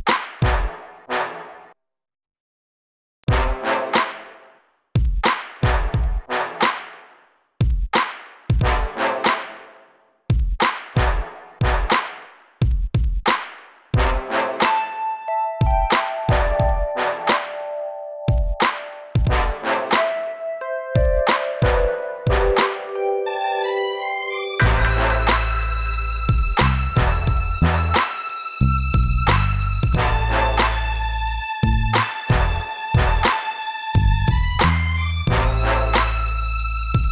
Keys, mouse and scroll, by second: 4.0 click, 5.9 scroll down 2, 6.4 middle click, 7.5 click, 10.2 click, 10.6 click, 11.1 Return, 11.6 right click, 13.4 click, 14.8 click, 15.4 click, 16.5 click, 17.3 click, 18.1 click, 19.3 click, 22.3 click, 22.8 click, 23.5 click, 24.9 scroll down 2, 26.3 scroll up 1, 27.4 scroll up 1, 29.2 click, 33.5 right click, 34.1 p.